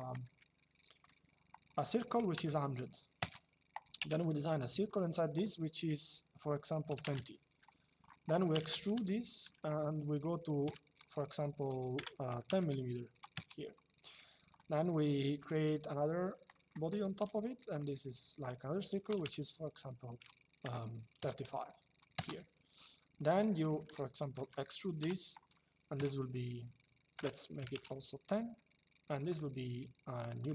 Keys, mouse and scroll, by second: 0.0 c, 0.7 click, 1.9 KP_1, 2.9 KP_Enter, 3.7 c, 4.6 click, 6.6 KP_2, 6.8 KP_Enter, 7.7 click, 8.2 e, 8.8 middle click, 10.4 KP_5, 11.7 BackSpace, 13.0 Return, 14.2 click, 16.2 middle click, 16.9 c, 17.5 click, 18.8 KP_3, 20.3 BackSpace, 22.9 click, 23.7 shift+middle click, 24.7 e, 25.7 KP_5, 26.8 BackSpace, 29.0 click, 30.1 click.